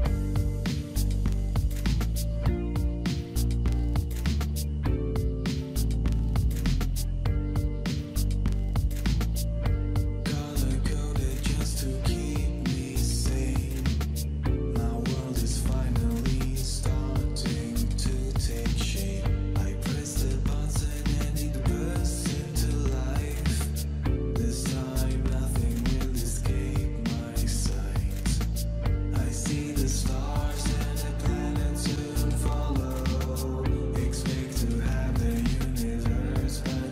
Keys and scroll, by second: 7.6 Up, 8.2 typing, 10.3 Down, 10.6 Down, 13.0 Down, 13.1 Down, 28.1 ctrl+g, 30.4-32.9 typing.